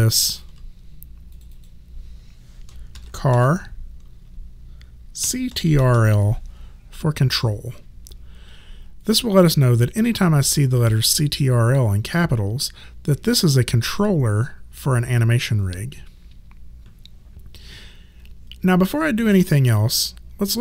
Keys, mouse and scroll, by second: 2.7-3.8 typing, 5.0-6.4 typing.